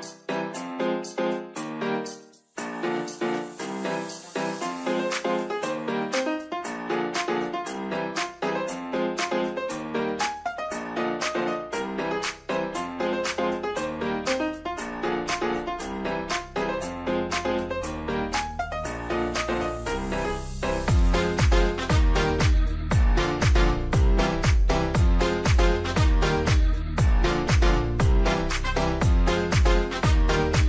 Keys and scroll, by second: 25.0 w.